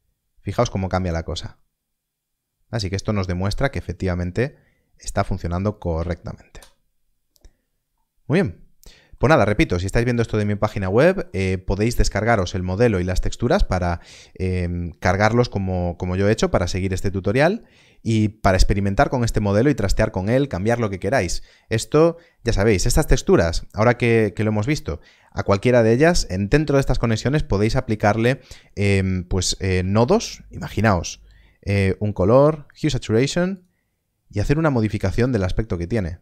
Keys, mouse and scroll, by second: 5.9 Left, 6.5 Return, 7.6-8.6 scroll down 1, 8.8 middle click, 9.3 shift+middle click, 10.3 ctrl+middle click, 10.9 shift+middle click, 12.7 alt+a, 16.4 alt+a, 16.5-16.9 scroll down 1, 17.3 middle click, 17.8 scroll down 1, 24.7 scroll up 1, 25.4 middle click, 25.9 scroll up 1, 29.7 scroll up 1, 29.9 shift+a, 32.6 shift+a, 35.2 shift+click.